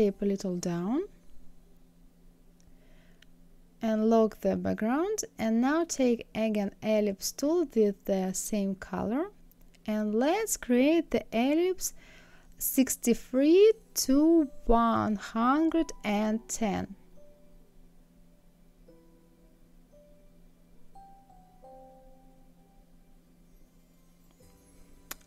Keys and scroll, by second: 14.1 KP_6, 16.4 KP_3, 21.7 KP_1, 22.3 KP_0.